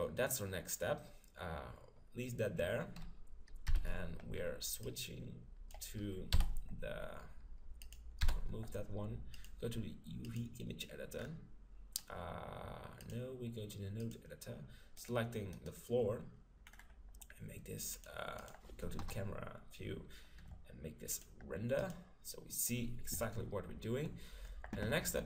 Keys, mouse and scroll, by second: 3.7 n, 4.8-6.7 drag, 6.3 t, 7.9-11.1 drag, 8.2 t, 11.2-13.3 middle drag, 13.0-14.7 drag, 15.0-17.4 right drag, 16.7-18.4 middle drag, 17.9-20.3 drag, 19.0 KP_0, 21.1-22.9 drag, 24.0-25.2 middle drag.